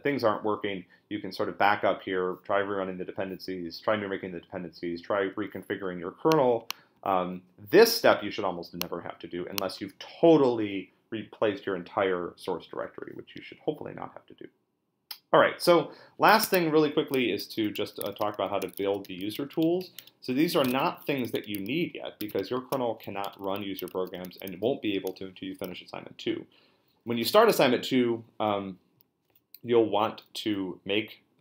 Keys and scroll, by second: 16.4 Tab, 18.1-23.5 typing.